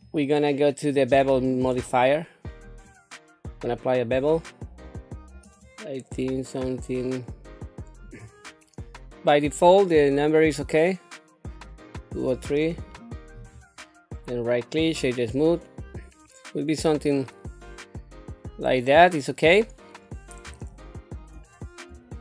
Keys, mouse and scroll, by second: 0.9-2.8 drag, 5.4 click, 8.0 click, 9.4 click, 11.5 click, 12.7 click, 14.1 right click, 14.9 right click, 16.2 scroll down 2, 16.8-19.1 middle drag, 19.5-19.9 scroll up 2, 20.6 shift+middle click, 21.5 scroll down 1, 22.1 shift+middle click.